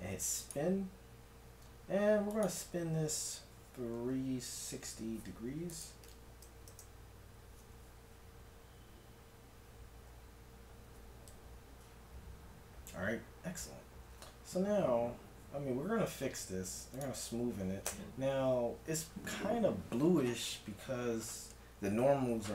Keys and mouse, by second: 2.2 click, 8.3 middle click, 10.1 a, 14.5 Tab, 16.9-18.9 drag, 17.9 Tab, 18.9-21.1 middle drag, 22.0 a.